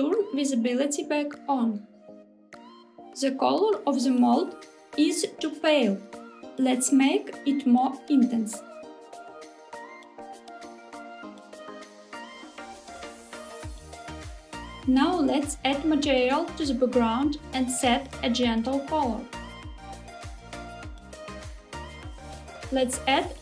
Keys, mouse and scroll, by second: 0.5 click, 2.9 middle click, 3.0-3.6 scroll down 2, 3.6-6.2 middle drag, 6.8-8.7 drag, 14.2 click, 14.8 click, 15.8 click, 17.2 click, 18.0 click, 20.8 f, 23.0-23.4 scroll down 1.